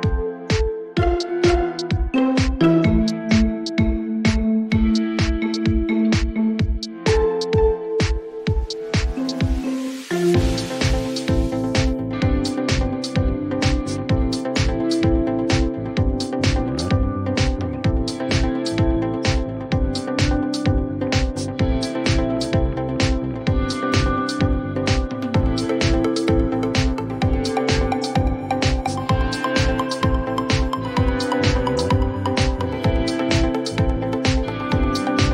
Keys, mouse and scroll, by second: 0.0-1.3 typing, 2.7 click, 2.8 click, 6.5 click, 7.5 typing, 8.5 Return, 11.0 click, 11.8-12.1 typing, 13.2 Return, 16.8 click, 18.2-20.7 typing, 23.2 typing, 24.3 click, 26.5-26.9 scroll, 27.5 click, 28.5 right click, 31.8 click, 33.0-34.5 drag, 33.0-34.8 typing.